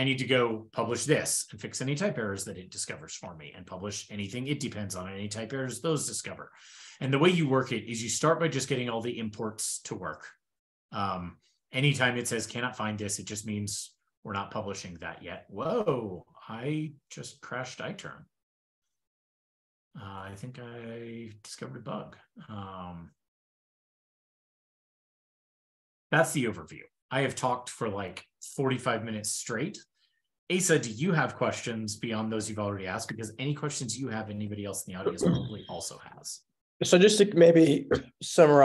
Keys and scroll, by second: 14.5 super+Tab, 15.8 ctrl+super+Return, 24.1 ctrl+l.